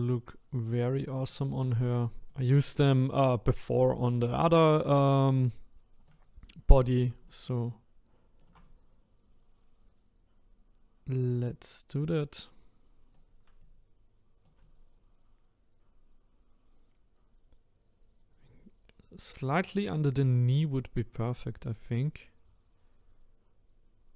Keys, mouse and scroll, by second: 1.6 click, 4.0-11.8 shift+right drag, 13.7-19.2 shift+right drag.